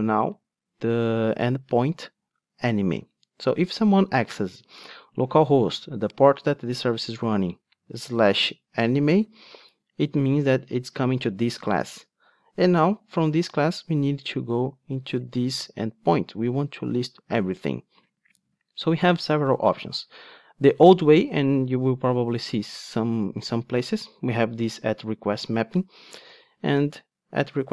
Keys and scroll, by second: 18.5 Tab, 22.8 Return.